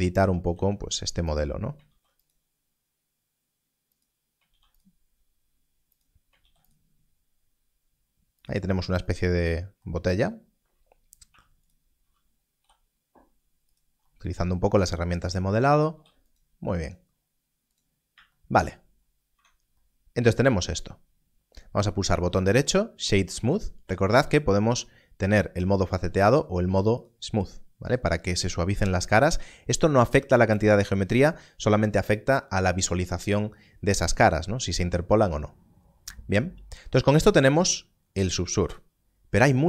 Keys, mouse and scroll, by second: 0.5 e, 1.3 click, 1.8 ctrl+r, 3.9 click, 4.4 ctrl+r, 5.9 click, 6.3 ctrl+r, 8.4 click, 11.2 3, 12.6 i, 13.7 click, 15.9 ctrl+r, 17.7 click, 18.6-19.3 scroll down 1, 22.1 right click, 26.9 click, 27.8 scroll up 1, 35.8-37.3 scroll up 1.